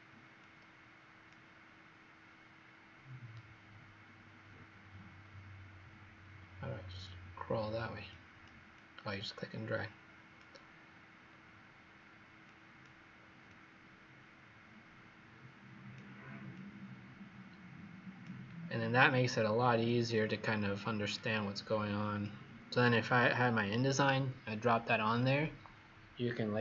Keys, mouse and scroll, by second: 5.3-5.8 scroll, 5.8-8.0 scroll down 1, 8.0 click, 8.7 click, 11.2-12.4 scroll down 2, 12.4 click, 18.6-19.8 scroll down 2, 19.8 click.